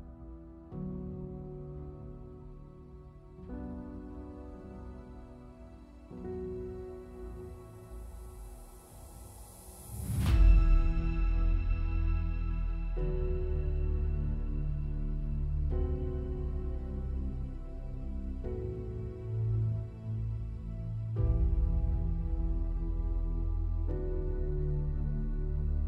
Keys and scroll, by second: 0.7 F8, 21.0 super+=.